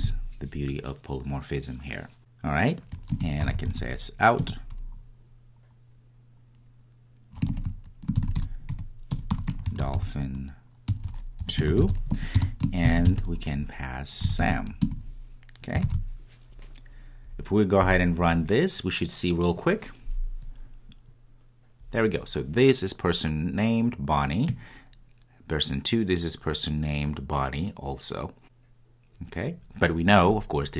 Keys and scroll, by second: 4.4 Return, 4.6 Return, 14.8 Return, 15.8 Return, 15.9 super+s, 17.8 ctrl+r.